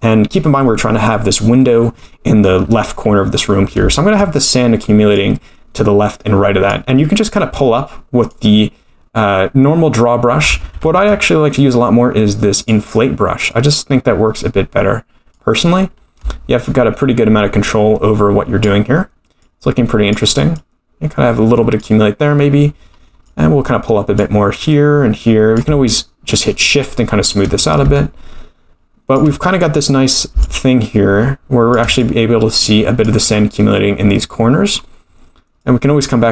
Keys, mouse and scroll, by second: 1.6 middle click, 3.9 shift+middle click, 4.7-5.1 scroll up 2, 5.1-6.7 drag, 7.3-8.3 drag, 10.6 ctrl+z, 11.0 ctrl+z, 12.6 click, 13.5-15.4 drag, 16.1-16.4 scroll up 2, 16.6-18.7 drag, 19.4 click, 20.5-21.8 drag, 22.8 scroll down 2, 23.2 click, 24.7 click, 26.4 shift+click, 27.9-29.1 shift+drag, 30.4-31.7 shift+drag, 32.0-33.1 drag, 34.2 middle click, 35.1-35.6 scroll up 2, 35.6-36.3 drag.